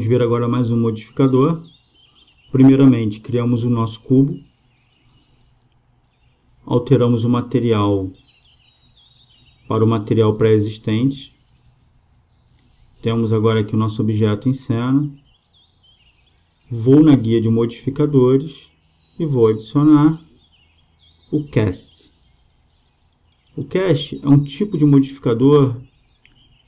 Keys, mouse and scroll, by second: 2.0 space, 7.9-9.6 drag, 10.9-12.6 drag, 18.1-19.9 drag, 20.1-21.9 drag.